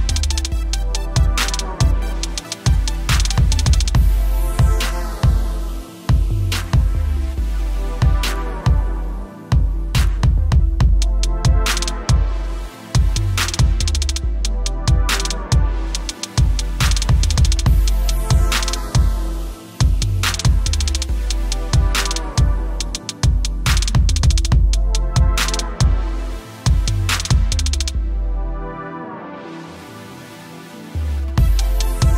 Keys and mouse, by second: 3.1 click, 25.3 click.